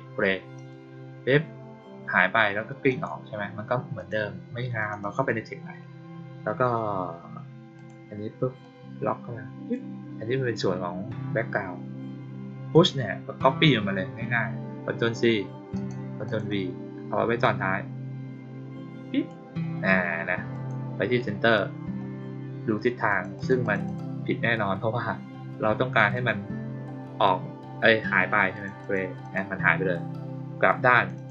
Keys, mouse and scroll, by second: 0.5 click, 2.8 click, 3.9 click, 4.7 click, 4.9 click, 7.7 click, 8.5-9.6 drag, 12.6 click, 15.7 click, 16.2 click, 17.3-19.2 drag, 20.4 click, 23.0 click, 23.3 click, 23.5 click, 23.8 click, 26.1 click, 28.5 click, 28.7 click, 29.1 click, 30.9 click, 31.1 click.